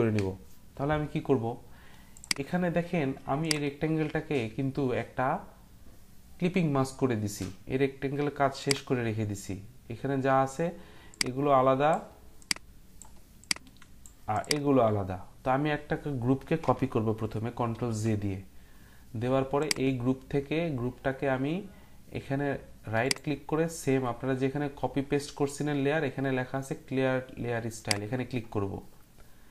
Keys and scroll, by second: 17.7 ctrl+j.